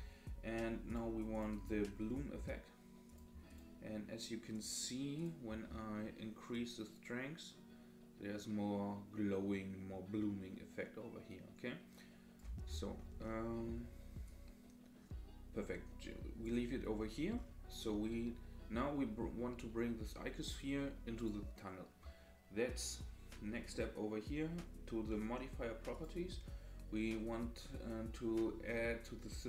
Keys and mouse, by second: 0.9 click, 1.3 click, 3.1 click, 3.5 click, 4.5 click, 6.5-12.4 drag, 13.3 middle click, 14.2-16.4 drag, 25.9 click.